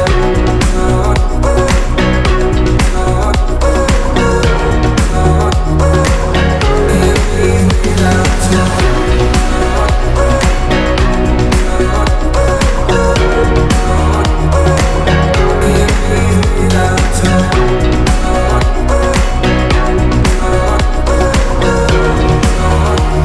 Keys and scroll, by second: 1.6 Escape, 21.7 space.